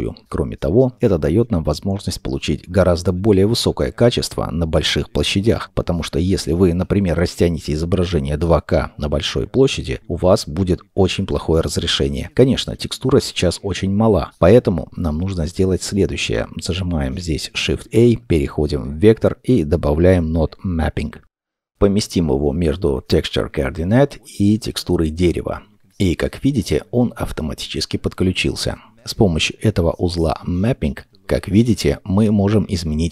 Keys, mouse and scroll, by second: 1.7 ctrl+n, 11.8-15.9 scroll down 1, 17.5 shift+a, 28.1 middle click, 29.5-31.1 scroll.